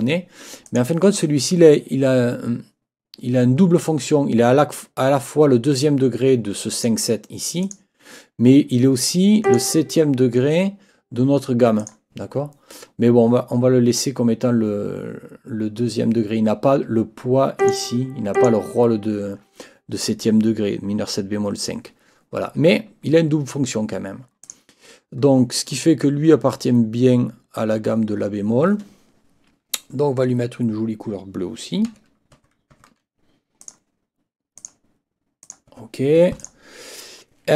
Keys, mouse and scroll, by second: 0.7 click, 6.7 click, 7.6 click, 9.4 click, 11.8 click, 17.6 click, 18.3 click, 24.4 click, 31.9 F8, 33.6 click, 34.6 click, 35.4 click, 35.7 F8, 36.4 click.